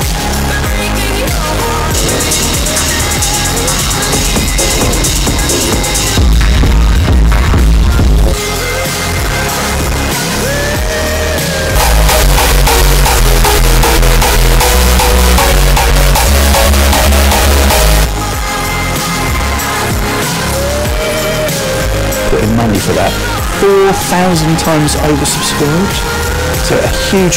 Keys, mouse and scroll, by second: 9.0 Page_Down, 18.0 Page_Down.